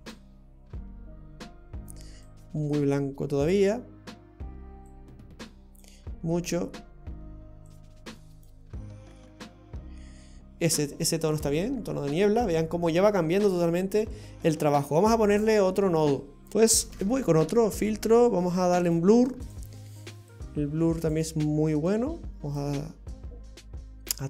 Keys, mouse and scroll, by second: 2.3 click, 4.9 click, 7.7 click, 11.7-14.4 scroll down 7, 14.4 scroll down 3, 15.4-16.1 scroll down 6, 16.1-16.7 scroll up 4, 16.7 Delete, 16.9 shift+a, 20.3 click, 21.9 click.